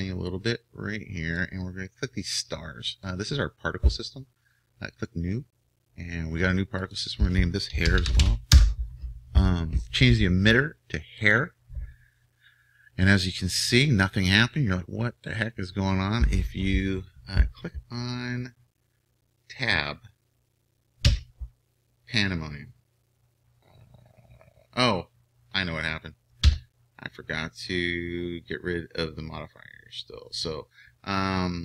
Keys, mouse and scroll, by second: 0.3-21.1 drag, 21.1 Tab, 26.5 Tab.